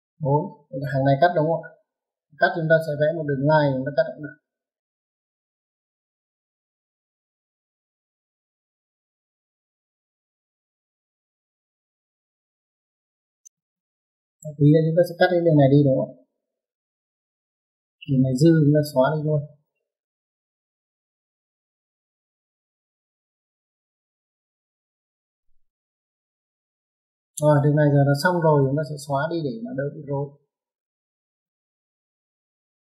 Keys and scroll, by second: 9.8 space, 18.8 typing, 27.6 typing, 32.0 typing.